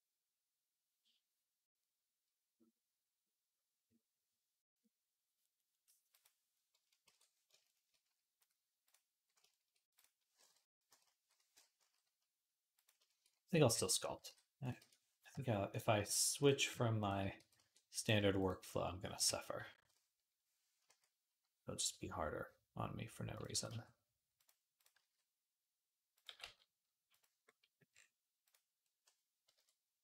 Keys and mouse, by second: 5.9 click, 6.9 alt+h, 11.6 s, 11.8 middle click, 12.3 click, 12.4-15.5 middle drag, 14.1 g, 14.6 Escape, 15.5 shift+click, 15.6 shift+middle click, 16.2 click, 16.2-30.0 shift+middle drag, 17.1 g, 18.9 KP_1, 20.7 s, 23.3 g, 24.8 s, 26.1 g, 29.3 KP_1.